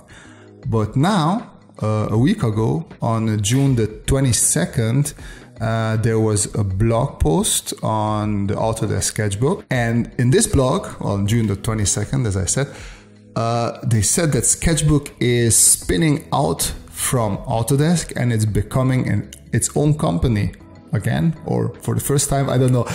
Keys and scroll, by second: 0.8 space.